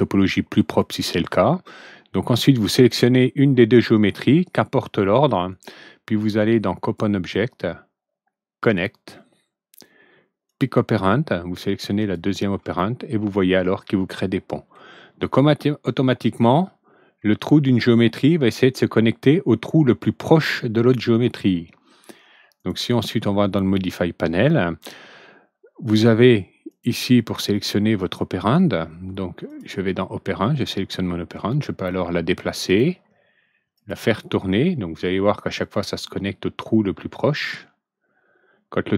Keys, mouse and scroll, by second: 0.7 click, 5.5 click, 6.8 click, 8.6 click, 10.4 click, 11.9 click, 12.7-14.7 ctrl+alt+middle drag, 22.5 click, 26.6 click, 27.5 click, 29.4 click, 31.5-32.7 drag, 33.7 click, 35.5-38.9 drag.